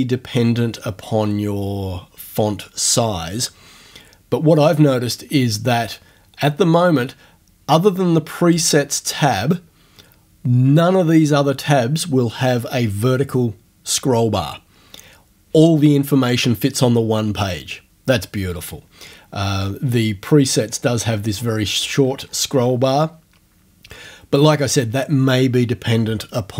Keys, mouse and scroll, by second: 8.5 click, 20.7-21.1 scroll down 2, 21.1 scroll up 2, 21.3 scroll down 2, 21.6 scroll up 2, 21.8-22.5 scroll down 2, 22.6 scroll up 2.